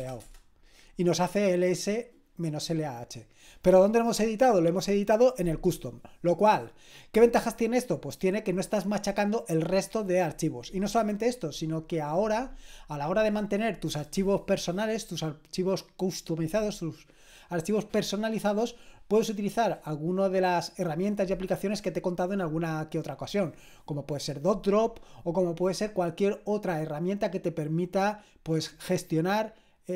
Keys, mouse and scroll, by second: 0.0-0.5 typing.